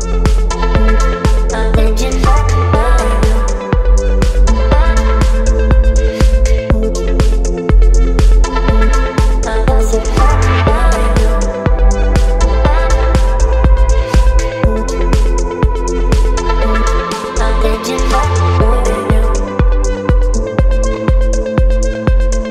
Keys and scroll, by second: 7.2 KP_8.